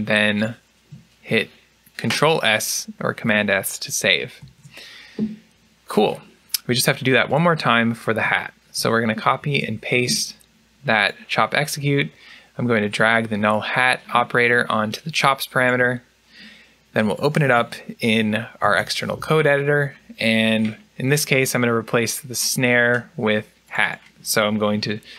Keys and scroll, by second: 4.3 ctrl+s, 8.6 ctrl+c, 9.3 ctrl+v, 18.5 ctrl+e, 24.6 typing.